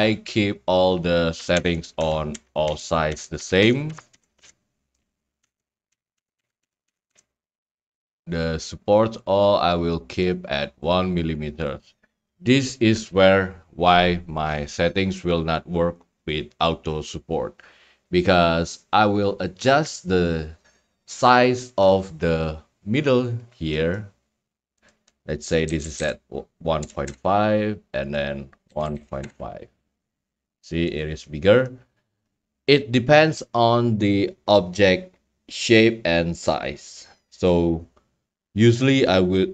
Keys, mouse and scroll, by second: 8.1 Tab, 9.0 click, 9.5 middle click, 10.2-10.5 scroll, 10.9 click, 11.6 click, 12.4 click, 23.4-24.5 scroll, 24.9 click, 25.4-27.1 typing, 25.5 click, 28.1 click, 28.4-29.4 typing, 31.0-32.1 drag, 32.2-33.3 middle drag.